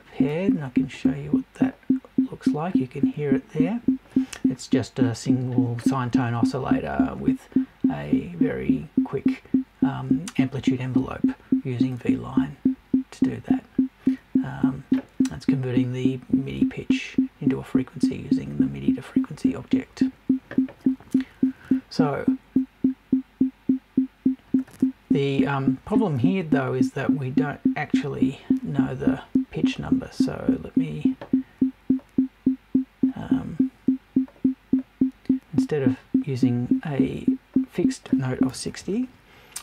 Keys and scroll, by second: 38.5 BackSpace.